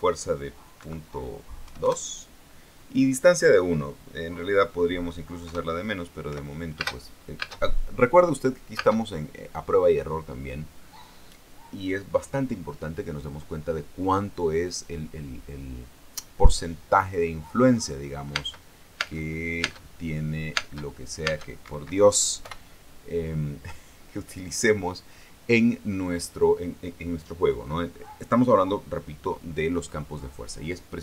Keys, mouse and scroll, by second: 0.1 click, 1.5 KP_Decimal, 2.4 KP_2, 2.5 KP_Enter, 6.2 KP_0, 7.0 p, 7.5 space, 9.5 space, 19.1 space, 21.3 space, 22.4 Escape, 23.2 p.